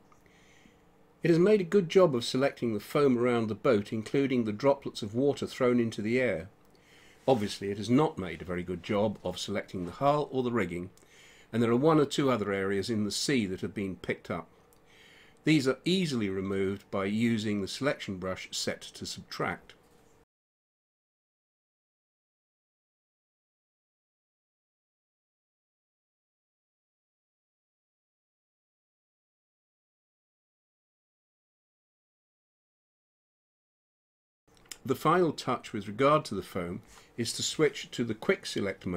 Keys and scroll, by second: 14.2 space, 20.2 space, 22.3 space, 24.7 ctrl+z, 26.5 ctrl+z, 27.3 ctrl+z, 32.0 space, 35.7 space.